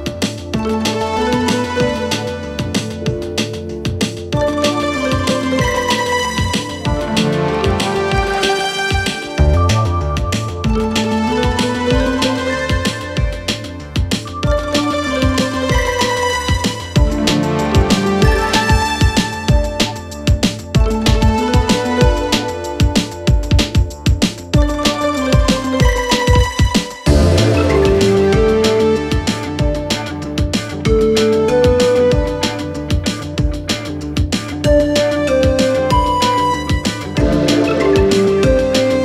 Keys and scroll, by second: 1.0 4, 3.6 3, 6.0 4, 12.6 3, 13.6 ], 15.2 4, 18.2 3, 18.6 ], 20.6 ], 21.1 ., 24.9 ctrl+z, 27.1 ctrl+z, 28.2 ], 29.0 ], 29.8 ], 30.6 4, 35.0 3, 35.3 ], 36.2 4, 38.2 3.